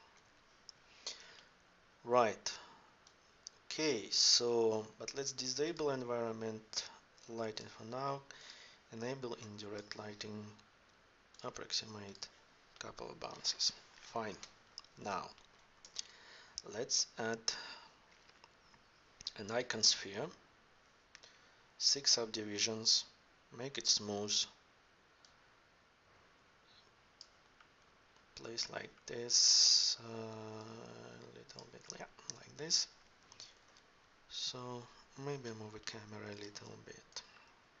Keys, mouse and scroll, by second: 0.0 F11, 15.8 shift+a, 23.6-26.4 drag, 27.6-28.2 middle drag, 30.5 right click, 33.4 KP_0, 35.3 n.